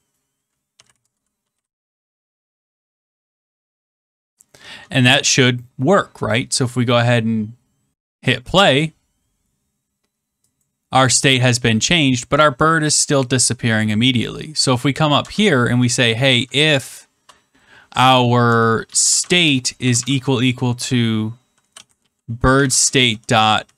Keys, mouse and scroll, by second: 0.4-3.6 typing, 8.2 click, 10.6 click, 13.1 click, 14.6 click, 15.2 Return, 15.9-16.7 typing, 19.7 typing, 21.3-23.7 typing.